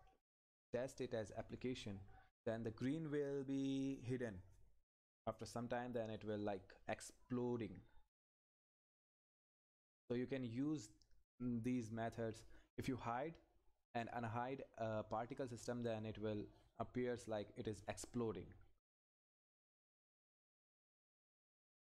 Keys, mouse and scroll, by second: 0.1 ctrl+F10, 5.7 Down, 7.3 Right, 9.8 Down.